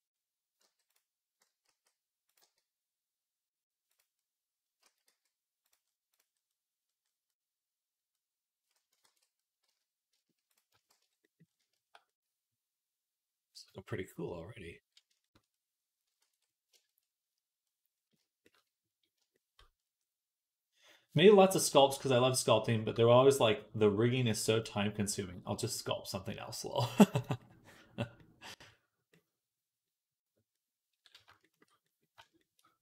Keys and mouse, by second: 0.4 g, 1.5 s, 2.2 g, 4.0 s, 4.7 s, 8.9 ctrl+s, 8.9-15.2 right drag, 9.5 z, 10.7 shift+c, 15.2-18.0 drag, 17.0 ctrl+s, 21.5 right click, 23.0-32.8 right drag, 27.0-31.1 drag, 27.0-31.1 middle drag.